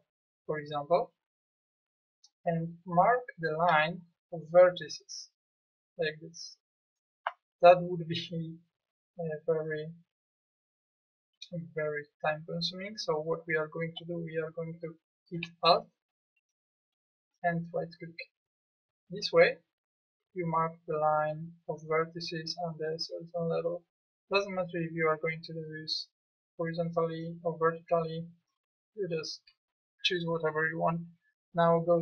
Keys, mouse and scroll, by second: 11.6 middle click.